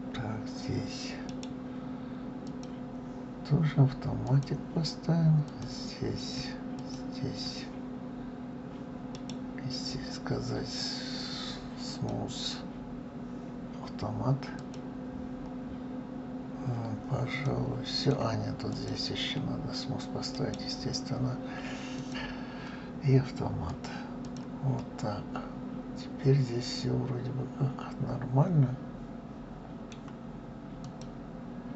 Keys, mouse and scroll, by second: 1.0 right click, 2.3 right click, 4.0 click, 5.2 click, 6.6 shift+click, 8.9 right click, 14.4 click, 17.2-18.5 middle drag, 18.5 click, 20.1 right click, 23.5 click, 24.0 click, 24.5-27.6 middle drag, 30.6 click.